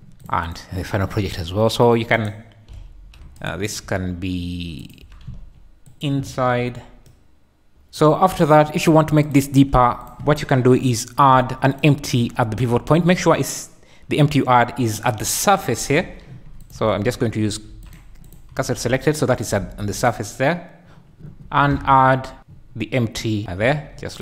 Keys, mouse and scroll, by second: 0.0 ctrl+v, 0.2 click, 0.5 click, 1.2 s, 2.7 ., 3.1 `, 3.4 drag, 3.8 s, 5.0 g, 5.3 z, 7.1-8.1 shift+drag, 11.9 `, 12.7 `, 14.0 KP_1, 15.9 shift+a, 16.6 click, 16.8 shift+s, 17.7 shift+s, 18.2 click, 18.8 shift+s, 19.6 shift+a, 21.5 shift+a, 23.6 s.